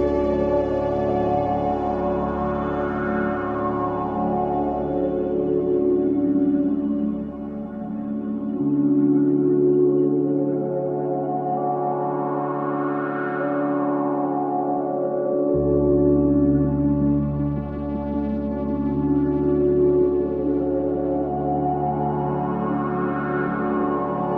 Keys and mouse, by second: 1.5 c, 2.1-7.0 drag, 9.5 click, 10.2 click, 10.5 click, 12.3 Escape, 15.0 F3, 16.5 click, 20.3 Tab, 20.9 click, 21.7 Tab.